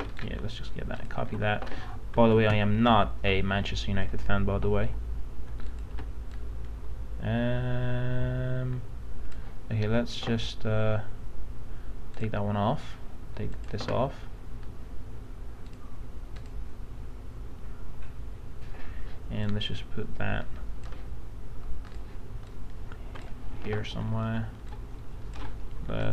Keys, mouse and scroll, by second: 0.1 right click, 0.9 click, 1.3 alt+Tab, 2.3 alt+Tab, 3.1 alt+Tab, 4.5 ctrl+v, 5.7-23.5 drag, 23.7 ctrl+t, 24.7 alt+shift+click.